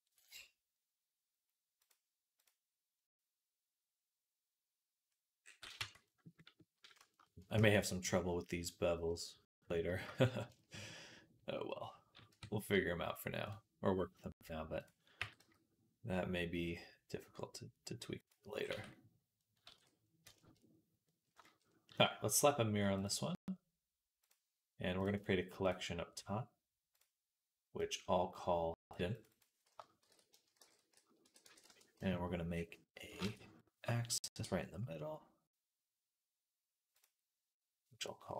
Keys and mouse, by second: 5.6 Tab, 7.5 ctrl+s, 12.2 Tab, 14.7-22.8 right drag, 15.0 g, 18.5 Tab, 19.6 ctrl+s, 22.8-26.8 middle drag, 26.8-28.6 drag, 26.8-28.6 right drag, 27.6 middle click, 28.6 middle click, 29.0 click, 29.0 right click, 29.1 middle click, 29.1-32.6 drag, 29.1-32.6 right drag, 33.1 shift+a.